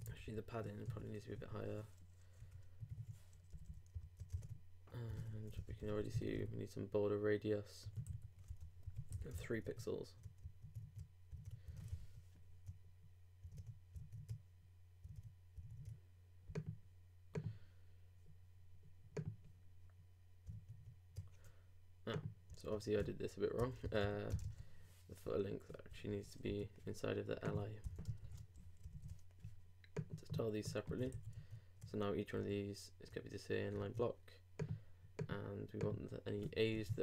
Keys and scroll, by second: 3.9 super+Down, 4.0 super+Right, 4.4 super+Tab, 5.3 super+Return, 9.3 super+;, 9.4 super+s, 9.6 super+Tab, 12.0 super+r, 13.5 super+Tab, 21.1 super+Tab, 23.6 super+Return, 24.4 shift+space, 24.5 shift+[, 28.0 shift+Return, 28.2 shift+], 28.8 shift+super+], 28.9 shift+super+Left, 29.4 super+Left, 31.0 super+Tab, 31.1 super+s, 31.3 super+Tab, 32.4 super+r, 33.8 super+Tab.